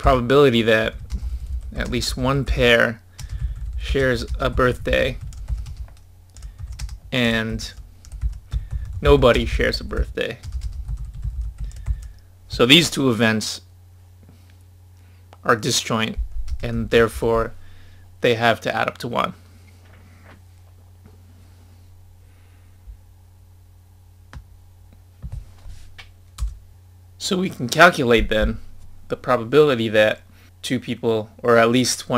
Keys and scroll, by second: 11.8 1.